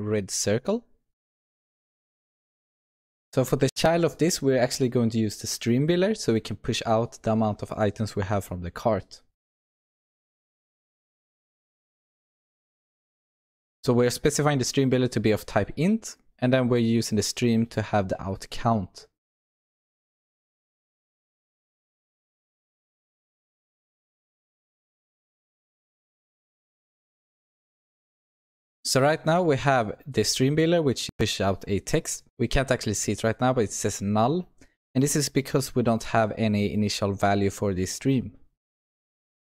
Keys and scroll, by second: 2.8 Return, 4.1 Return, 12.0 Return, 20.0 Return, 23.0 Return, 24.7 Return, 26.5 ctrl+alt+l, 27.6 ctrl+s.